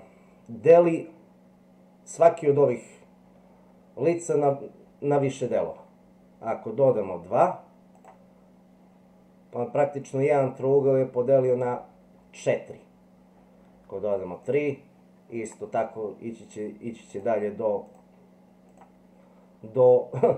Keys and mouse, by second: 8.0 click, 14.4 click, 17.1 click, 17.8 click, 18.7 click.